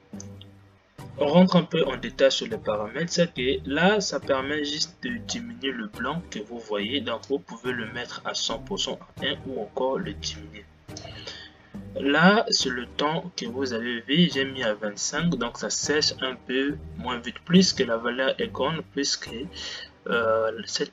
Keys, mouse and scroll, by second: 0.6-1.7 scroll down 4.